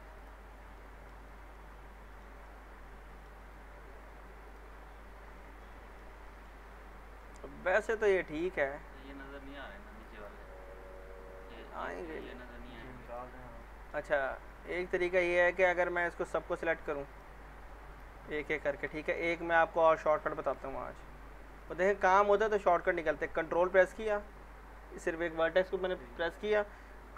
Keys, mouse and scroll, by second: 0.8-1.4 alt+middle click, 1.3 scroll up 1, 1.5-3.4 alt+middle drag, 4.4 click, 4.5 click, 5.1 scroll up 1, 5.6-6.2 alt+middle click, 6.5-6.9 scroll up 1, 7.2 middle click, 9.9 click, 9.9 click, 13.6 middle click, 14.5 middle click, 15.1-15.8 scroll up 1, 15.8 scroll down 1, 17.1 click, 20.2 click.